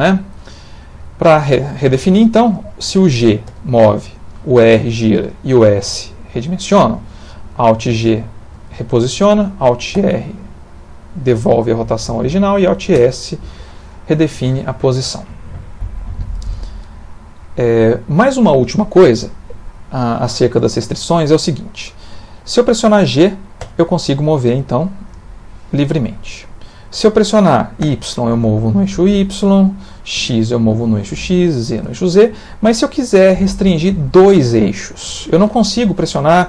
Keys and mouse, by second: 0.9 middle click, 3.5 g, 4.6 r, 5.6 s, 8.0 alt+g, 10.0 alt+r, 12.9 alt+s, 18.0 middle click, 19.5 middle click, 23.6 g.